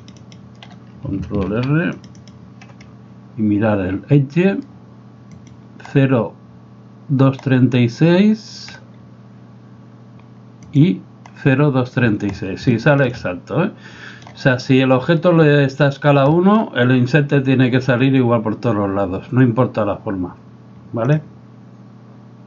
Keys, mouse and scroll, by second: 1.6 ctrl+r, 5.4 right click, 10.7 right click, 12.9 shift+middle click, 13.2-14.3 middle drag, 16.3 middle click.